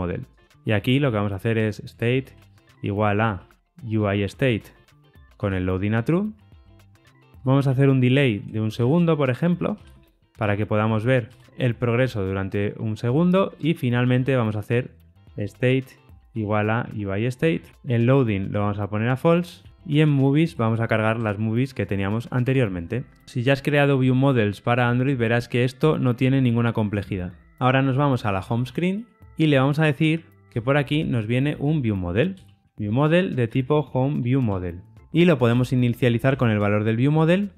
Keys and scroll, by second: 3.9 Return, 9.4 Return, 18.6 Return, 22.3 Tab, 34.5 Return.